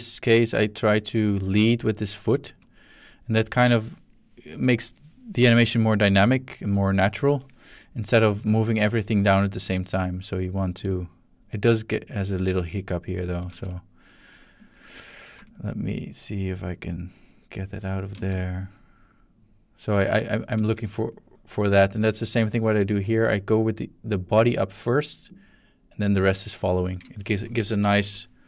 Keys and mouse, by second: 2.4-3.1 ctrl+middle drag, 8.4-13.7 drag, 13.5 z, 14.6 click, 15.3 x, 15.5 click, 16.0-18.1 drag, 18.1 space, 20.5 space, 21.1-26.9 drag.